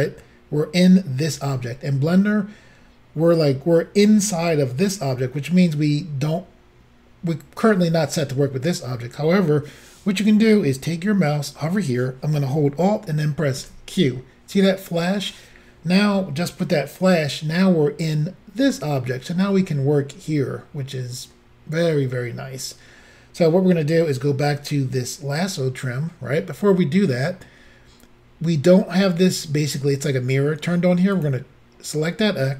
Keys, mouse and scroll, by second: 13.6 alt+q, 31.2 click.